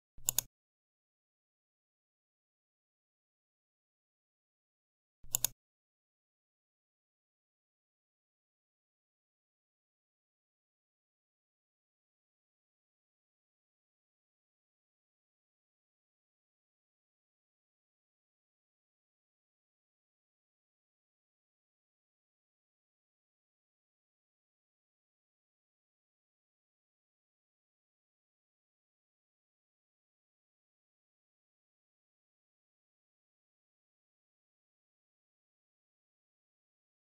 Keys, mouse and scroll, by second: 0.2 click, 5.2 click, 33.2 click.